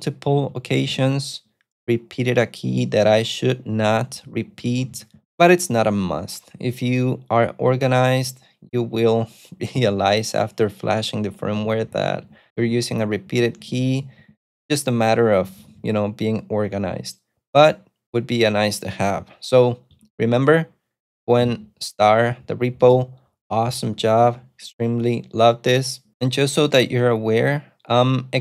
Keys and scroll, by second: 0.0-1.5 typing, 3.7-5.7 typing, 11.2-16.2 typing, 20.2 ctrl+shift+F19, 20.6 ctrl+shift+F19, 24.3 scroll.